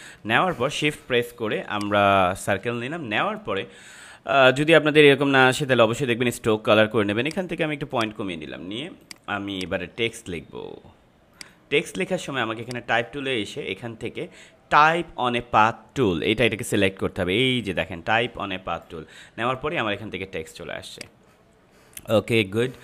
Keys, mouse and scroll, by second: 1.7-7.2 shift+drag, 11.3 right click, 12.6-20.9 drag.